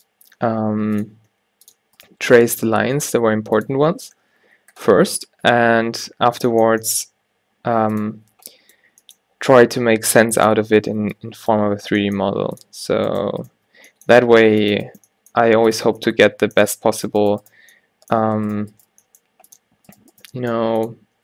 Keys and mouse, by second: 1.4 g, 2.4 g, 3.9 a, 4.0 a, 4.2 middle click, 6.8 g, 8.2 a, 8.5 b, 9.0 g, 10.8 a, 11.0 b, 12.0 g, 13.2-16.7 drag, 13.8 g, 15.1 g, 15.9 Tab, 16.7 Tab, 18.7 shift+click, 19.0 g, 20.3 g.